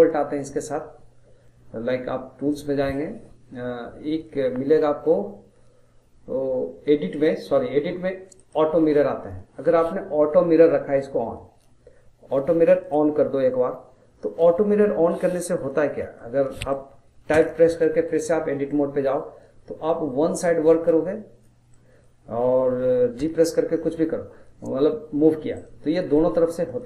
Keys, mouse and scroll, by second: 2.5 click, 7.1 click, 8.3-11.4 drag, 12.8-14.4 drag, 14.4-15.1 middle drag, 15.1-15.4 scroll up 1, 15.4-17.3 middle drag, 17.3 Tab, 17.8-20.9 middle drag, 20.9 click, 21.7-23.2 middle drag, 23.2 g, 26.0 middle click, 26.5 scroll down 2, 26.7 middle click.